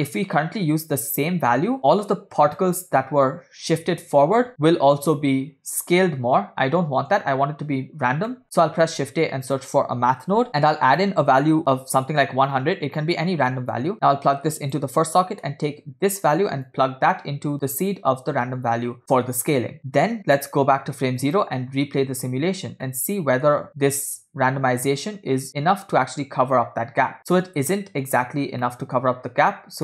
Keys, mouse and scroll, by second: 0.0 middle click, 2.5 click, 8.3 middle click, 8.9 shift+a, 10.5 scroll up 2, 10.9-12.1 drag, 11.7 0, 13.8-14.9 drag, 15.2 scroll down 2, 15.5 middle click, 16.8-19.6 drag, 21.5 drag, 21.9 space, 22.9-23.6 shift+middle drag, 27.3 space, 28.7 middle click, 29.2 scroll up 4.